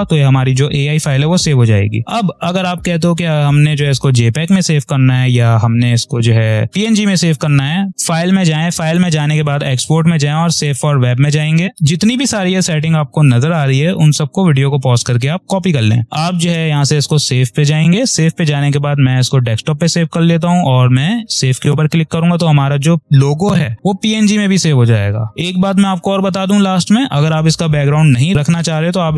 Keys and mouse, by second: 7.9 click, 8.0 click, 10.5 click, 11.4 typing, 16.7 click, 19.0 click, 28.8 click.